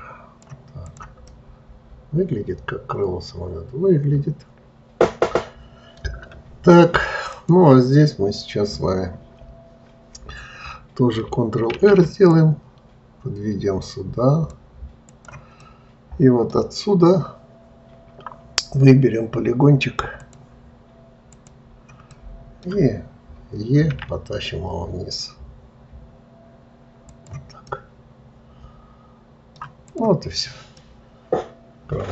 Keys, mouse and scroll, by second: 0.8 click, 1.2-4.3 middle drag, 7.3 click, 15.5-16.9 middle drag, 16.9 scroll up 2, 17.9-19.5 scroll down 1, 20.2 click, 21.3 click, 22.1-23.9 middle drag, 23.9 e, 27.6-29.8 middle drag, 29.8 click, 30.7-32.1 middle drag.